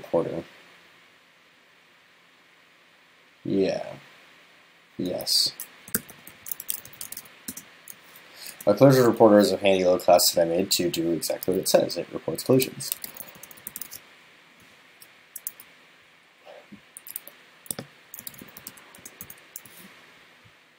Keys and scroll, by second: 15.5 super+s.